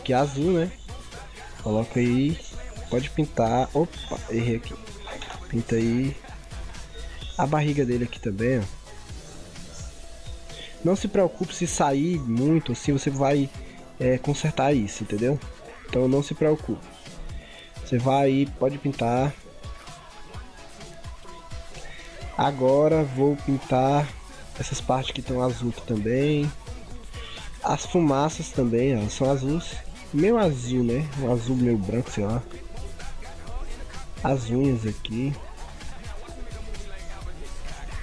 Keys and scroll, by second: 4.3 ctrl+z.